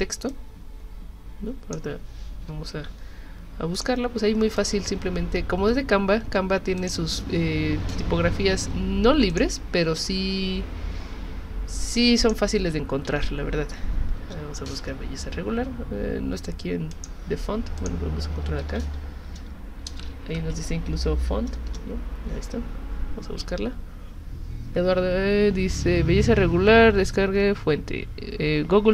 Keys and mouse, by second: 0.3-1.7 drag, 2.7 ctrl+c, 3.8 click, 4.6 click, 6.8 click, 9.3 click, 12.2 click, 13.1 ctrl+v, 16.9 click, 17.8 click, 18.6 ctrl+v, 20.9 Down, 21.7 Return.